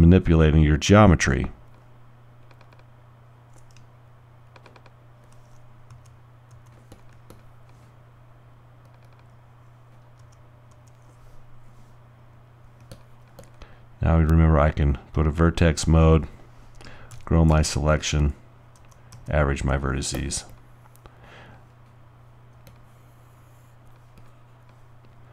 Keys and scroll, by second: 6.0 shift+g, 6.6 g, 10.2 g, 12.5 g, 17.1-17.5 typing, 18.6-19.6 typing.